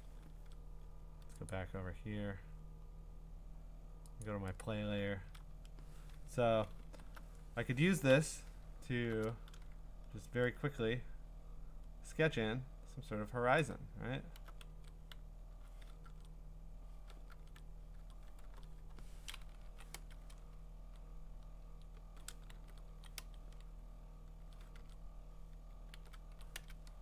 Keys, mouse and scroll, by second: 1.5 click, 1.8-4.1 scroll, 4.2 click, 4.6 click, 4.8 middle click, 5.0 middle click, 5.1 middle click, 6.8 alt+BackSpace, 8.1 ctrl+i, 8.8 middle click, 8.9 middle click, 10.0-11.1 scroll, 13.6 click, 14.2 scroll, 14.7 ctrl+z, 15.5 x, 16.1 ctrl+Tab, 17.3 ctrl+Tab, 18.4 ctrl+w, 19.7 Right, 19.9 Return, 21.6 Right, 22.5 ctrl+w, 22.9 Right, 23.2 Return, 24.8 ctrl+Tab, 25.9 ctrl+w, 26.3 Right, 26.6 Return.